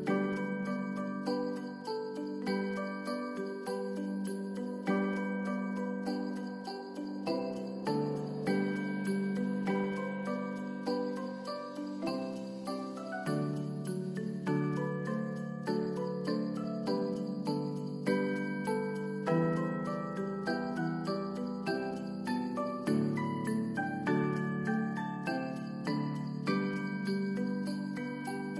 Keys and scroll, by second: 10.7 ctrl+s, 12.0 space, 15.7 space, 16.3 ctrl+s.